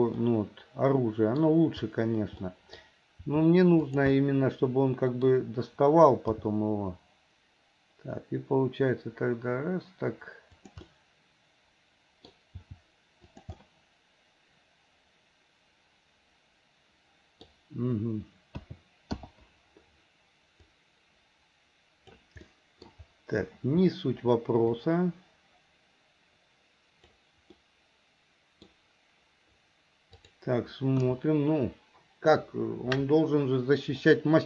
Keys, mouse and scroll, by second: 0.2-1.4 middle drag, 2.4 middle click, 3.3 r, 4.2-5.3 middle drag, 6.3 g, 10.9-12.3 middle drag, 12.7 g, 13.5-17.5 middle drag, 18.7 a, 19.2 i, 20.8-22.3 drag, 22.5 middle click, 24.8-27.2 drag, 27.6-28.7 middle drag, 30.2 click, 31.1 KP_1, 34.1 middle click.